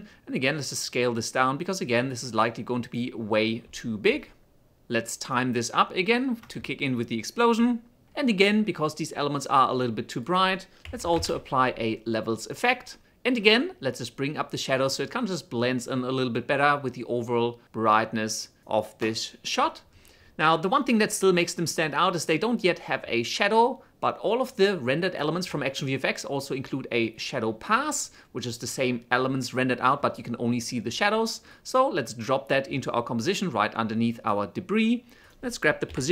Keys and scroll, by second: 0.2 s, 3.3 s, 11.5-12.7 typing, 35.6 p, 35.9 shift+s.